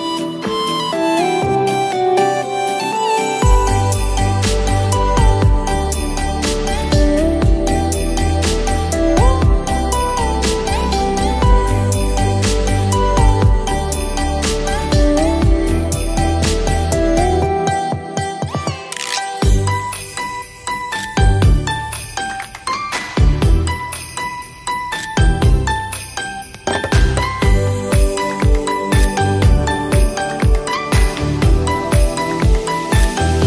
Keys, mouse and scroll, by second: 0.0-5.6 drag, 7.8 click, 8.0 ctrl+a, 8.6-12.2 drag, 12.2-15.8 drag, 15.8-17.6 drag, 19.3 click, 24.1 click, 25.9 ctrl+t, 26.3-28.6 drag, 30.2 click.